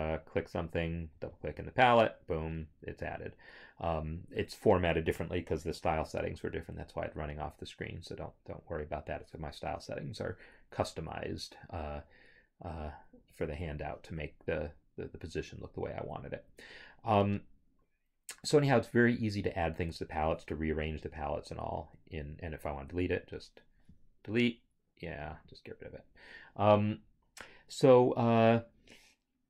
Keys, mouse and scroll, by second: 0.3 click, 1.3 double click, 3.0 double click, 3.1 scroll, 12.9 click, 13.9 click, 21.0 click, 22.8 click, 25.5 click.